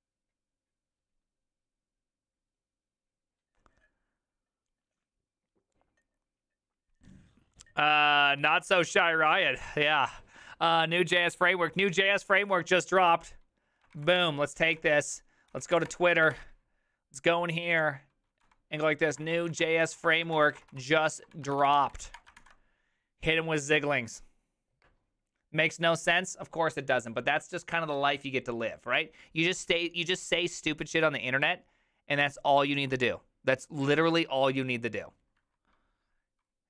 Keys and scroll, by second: 13.9 ctrl+l, 14.3 ctrl+c, 14.7 ctrl+t, 15.2-16.3 typing, 18.4-22.8 typing.